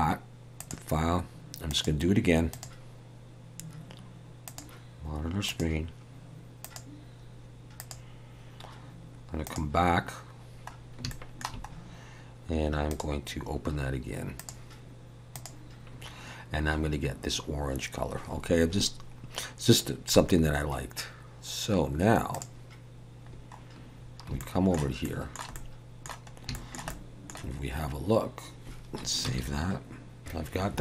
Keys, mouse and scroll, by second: 22.3 click, 23.3-24.0 scroll down 4, 24.0-24.4 scroll down 4, 24.4 shift+middle click, 25.0 shift+middle click, 25.5 middle click, 26.3 scroll up 1, 26.5 shift+middle click, 26.9 middle click, 29.3 ctrl+s, 30.2 click.